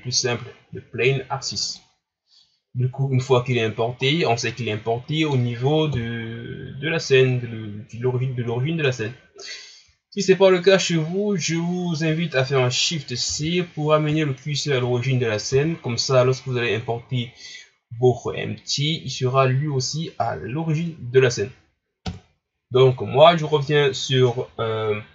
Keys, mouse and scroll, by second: 2.0 scroll down 3, 2.8-3.2 scroll up 4, 3.7 ctrl+scroll up 2, 4.1 scroll down 3, 4.5-5.9 middle drag, 5.9 KP_1, 6.8 scroll down 4, 7.4 scroll up 5, 12.3 ctrl+scroll down 1, 13.2 shift+c, 14.4-15.2 shift+scroll up 3, 15.5 KP_3, 20.7 ctrl+scroll up 1, 22.1 KP_1.